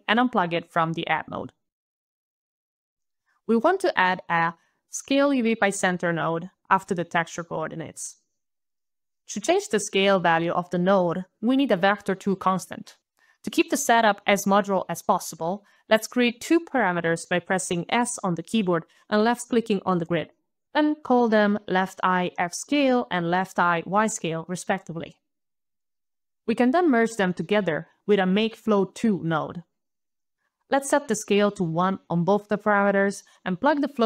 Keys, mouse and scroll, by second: 0.1 alt+click, 0.1 alt+click, 1.2 alt+right click, 1.7 alt+click, 2.4 alt+right click, 3.4 alt+s, 3.6 alt+c, 3.7 alt+a, 3.9 alt+l, 4.0 alt+e, 4.1 alt+space, 8.8 alt+click, 9.2 alt+click, 18.4 alt+s, 18.8 alt+click, 19.3 alt+s, 19.8 alt+BackSpace, 20.0 alt+BackSpace, 20.1 alt+shift+l, 20.1 alt+shift+-, 20.2 e, 20.3 alt+shift+y, 20.5 alt+BackSpace, 20.7 alt+BackSpace, 20.9 alt+shift+-, 20.9 alt+shift+x, 21.0 alt+shift+-, 21.1 alt+shift+s, 21.1 alt+c, 21.2 alt+a, 21.2 alt+l, 21.3 alt+e, 21.3 alt+Return, 21.4 alt+click, 21.7 alt+click, 22.0 alt+shift+l, 22.2 alt+shift+-, 22.2 alt+shift+e, 22.2 alt+y, 22.4 alt+shift+-, 22.6 alt+shift+-, 22.6 alt+shift+s, 22.7 alt+c, 22.7 alt+a, 22.7 alt+l, 22.8 alt+e, 22.8 alt+Return, 23.2 alt+click, 26.3 alt+click, 27.6 alt+m, 27.6 alt+a, 27.7 alt+k, 27.8 alt+e, 28.0 alt+space, 28.9 alt+Up, 29.4 alt+Return, 30.9 alt+click, 31.0 alt+click, 31.2 alt+1, 31.3 alt+click, 31.6 alt+click, 31.7 alt+click, 31.9 alt+1, 32.1 alt+click, 32.7 alt+click.